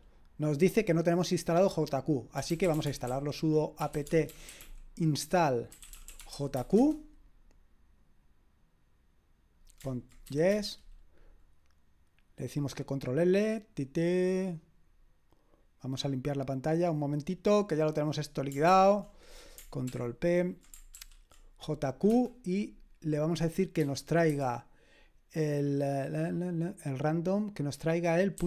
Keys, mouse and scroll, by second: 2.1-7.0 typing, 10.4 y, 10.5 Return, 18.7 ctrl+l, 19.8 ctrl+p, 21.0 ctrl+p, 22.1 space, 24.2 typing, 28.2-28.4 typing.